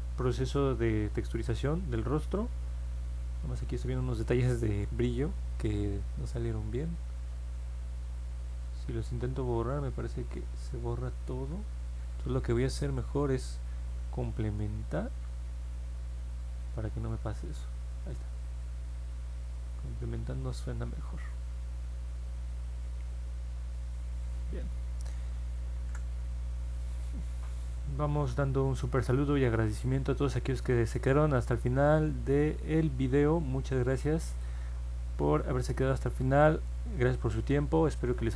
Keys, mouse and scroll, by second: 0.7 middle click, 1.0 middle click, 3.1 middle click, 8.9-10.7 drag, 11.2 ctrl+z, 15.1 click, 15.9 click, 16.2 click, 16.6 click, 16.9 click, 17.3 click, 17.6 click, 18.0 click, 18.3 click, 19.4 click, 20.4 click, 20.7 click, 21.0 click, 21.3 click, 21.6 click, 21.9 click, 22.2 click.